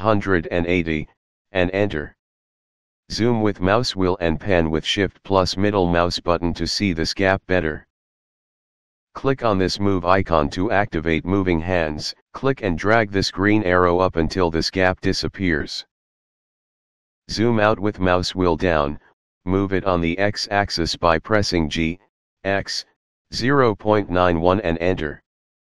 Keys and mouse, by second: 1.0 Return, 3.5 shift+middle click, 6.2 shift+middle click, 10.5 click, 13.7 click, 18.2 g, 20.1 x, 21.4 KP_Decimal, 22.0 KP_9, 22.6 KP_1, 23.9 Return.